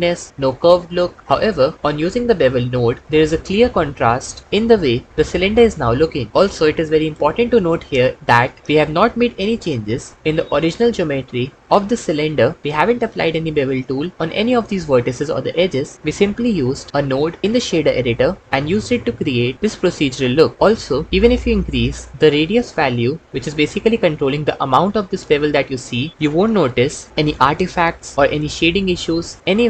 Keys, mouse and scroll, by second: 11.7 Tab, 15.4 Tab, 23.9-25.5 drag, 26.1 click.